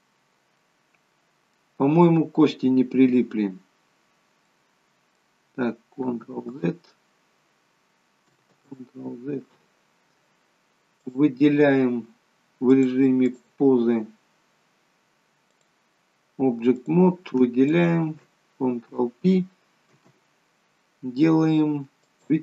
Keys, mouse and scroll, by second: 0.6 middle click, 4.4 middle click, 6.6 ctrl+z, 8.8 ctrl+z, 11.0 click, 12.6 click, 16.7 click, 17.6 shift+click, 19.8 ctrl+p.